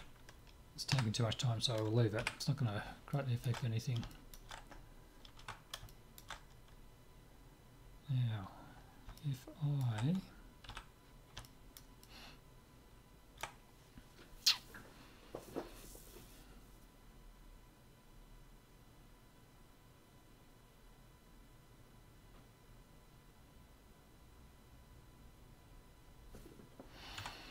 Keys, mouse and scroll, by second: 0.9 KP_Decimal, 2.2 KP_7, 3.1-10.7 middle drag, 10.7 z, 11.5-14.0 middle drag.